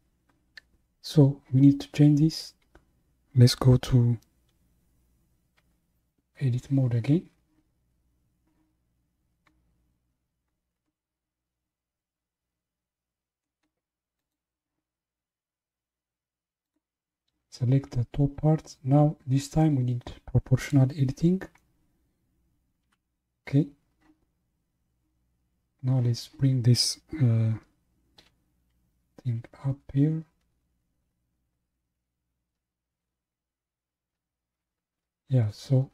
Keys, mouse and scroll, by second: 6.6 Tab, 10.8-13.9 middle drag, 14.2 click, 16.6 click, 20.6 click, 22.9 KP_1, 24.4-25.0 scroll down 1, 29.0 g.